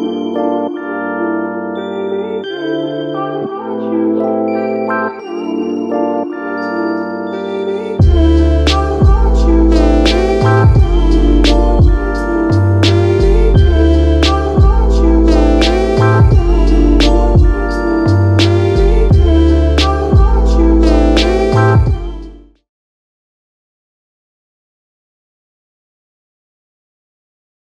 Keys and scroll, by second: 2.2 Delete, 2.9 7, 3.7 Return, 10.2 ctrl+z, 23.1 typing.